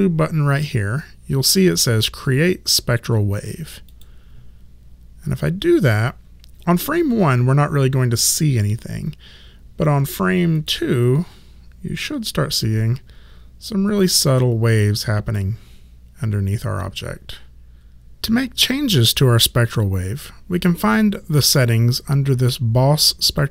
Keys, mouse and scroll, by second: 3.9 click, 8.2 click, 10.6 click, 17.2 click, 23.3 click.